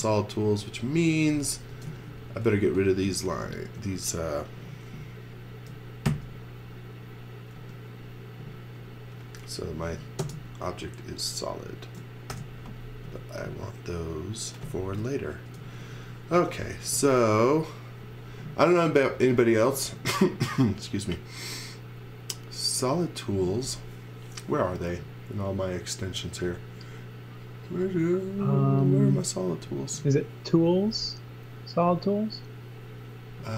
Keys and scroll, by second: 1.1-2.3 typing, 6.1 super+x, 7.6 e, 10.2 space, 12.3 alt+shift+v, 13.0 m, 15.4 space, 15.6 x, 16.4 z, 16.9 space, 17.9 space.